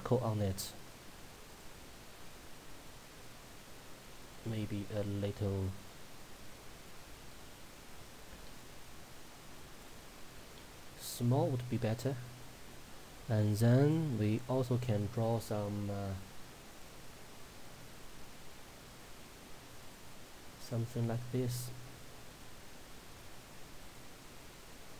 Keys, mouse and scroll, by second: 0.7-1.6 scroll up 1, 1.6-11.1 drag, 11.1-13.9 drag, 16.7 click, 19.9 click.